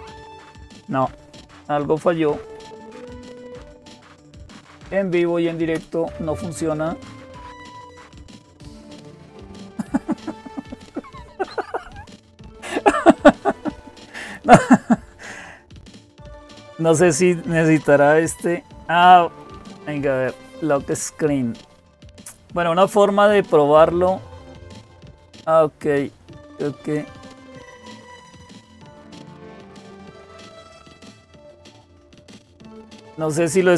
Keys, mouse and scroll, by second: 14.0 click, 15.5 click, 32.5 click.